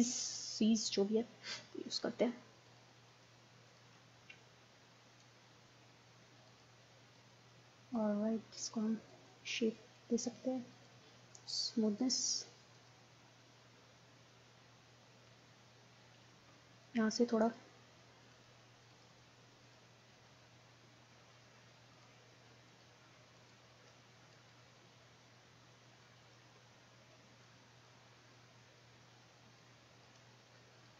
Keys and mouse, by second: 0.5 click, 0.6-2.7 middle drag, 2.7-4.9 drag, 5.0 click, 5.1 middle click, 6.5-13.2 drag, 13.2 middle click, 13.6 click, 13.7 middle click, 13.8 click, 14.0-15.4 middle drag, 15.7-16.9 middle drag, 16.9-21.4 drag, 21.4 middle click, 22.0 click, 22.3-27.1 middle drag, 27.1-28.3 drag, 28.3-30.5 middle drag, 30.5 click.